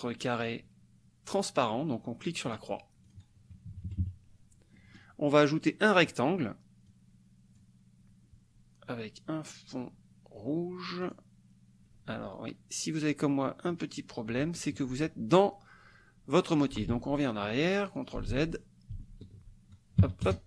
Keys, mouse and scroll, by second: 2.6 click, 3.1 click, 3.7 KP_Subtract, 4.8 click, 5.9 click, 6.9-8.0 drag, 11.2 click, 13.7 click, 16.9 ctrl+z, 17.9 ctrl+click, 18.3 ctrl+z, 20.0 KP_Subtract, 20.2 KP_Add.